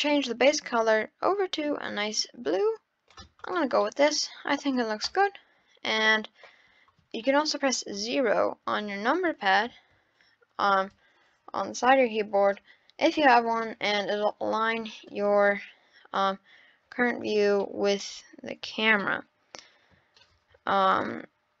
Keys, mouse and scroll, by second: 3.4 click, 3.8-5.0 middle drag, 5.0 KP_0, 8.2 KP_0, 9.6 0, 12.4 KP_0, 14.2-15.1 middle drag, 15.1-16.0 scroll down 6, 16.0-16.3 scroll up 3, 17.6 scroll up 1, 17.7-20.9 middle drag, 20.9-21.6 drag.